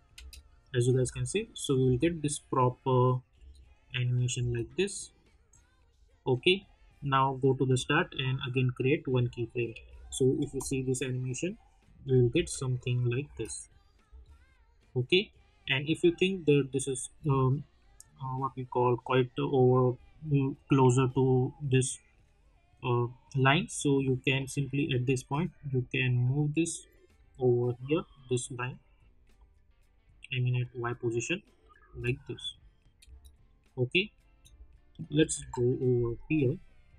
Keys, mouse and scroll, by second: 0.6 click, 0.9 space, 2.5 click, 3.3 space, 5.2 click, 9.0 click, 9.7 -, 9.9 =, 10.4 space, 12.3 space, 12.9 click, 13.2 space, 14.6 click, 20.8 click, 21.4-22.2 alt+scroll up 2, 25.5-27.4 drag, 27.4 scroll down 1, 29.3 click, 31.8 space, 33.4-35.1 drag, 35.1 =, 35.3 =, 36.1-36.9 drag.